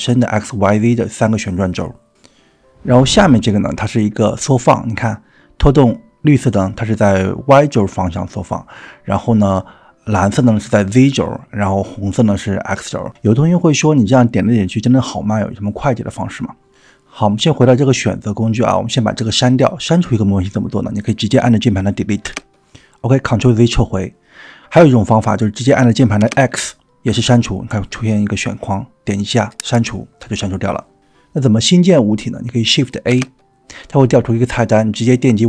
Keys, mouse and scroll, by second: 0.4 click, 1.5 click, 2.2 click, 3.3 click, 5.0 click, 7.5-8.7 drag, 10.2-11.7 drag, 12.8 click, 14.8 middle click, 15.2 drag, 15.4-16.1 middle drag, 16.4-16.8 scroll down 3, 16.8 drag, 16.9 middle click, 17.0-17.7 drag, 19.0 click, 19.8 click, 22.2 Delete, 24.0 ctrl+z, 25.9 click, 26.4 x, 33.1 shift+a.